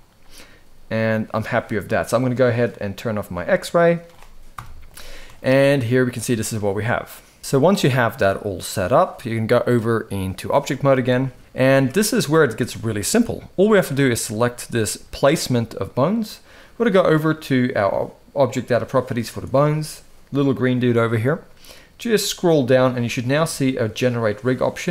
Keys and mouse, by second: 0.1 g, 2.8 click, 3.5 shift+middle click, 4.3 KP_1, 5.1 shift+middle click, 7.4 KP_1, 7.7 middle click, 9.3-10.2 drag, 10.6 shift+middle drag, 11.4 alt+a, 11.9 shift+middle drag, 12.6 middle click, 14.7 g.